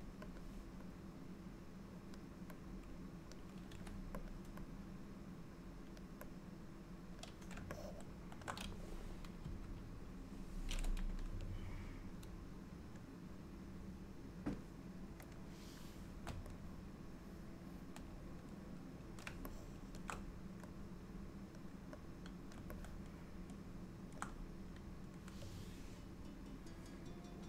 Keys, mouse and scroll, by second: 1.0 click, 2.7 click, 3.7 f, 4.9 click, 6.5 click, 7.8 shift+middle click, 9.5 KP_5, 13.4 click, 15.4 click, 16.7 middle click, 19.6 shift+middle click, 20.9 click, 22.3 click, 22.9 middle click, 27.2 click.